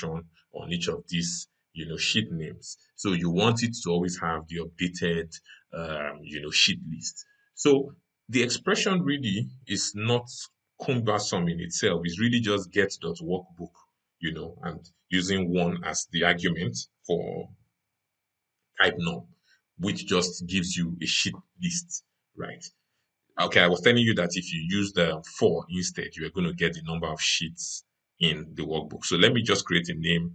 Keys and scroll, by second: 30.0 ctrl+F3.